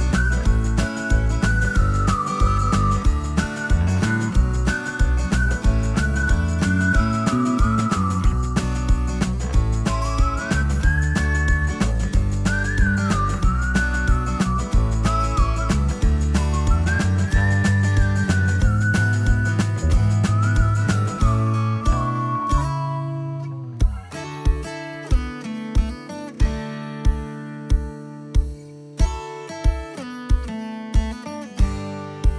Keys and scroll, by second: 6.9-8.1 typing, 9.1 F2, 17.7 p, 20.0 F2, 20.4 F3, 21.1 F4, 23.6 m, 25.4 Left, 29.1 space, 31.2 space, 31.5 Escape, 31.8 Escape, 32.0 Escape, 32.2 Escape.